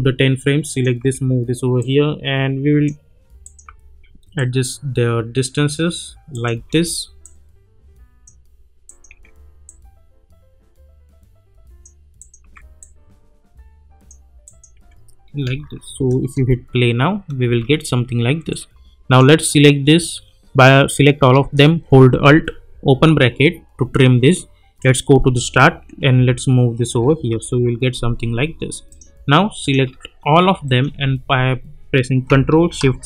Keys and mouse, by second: 1.0 [, 1.8-3.0 drag, 3.6 [, 4.3-5.9 drag, 6.5 [, 7.2-8.4 drag, 9.1 [, 9.6-11.8 drag, 12.4 [, 12.8-14.3 drag, 14.7 [, 15.5 space, 18.5-19.4 drag, 22.9 alt+[, 24.8-25.4 drag, 26.1-27.3 typing, 28.9 click, 30.6 shift+click.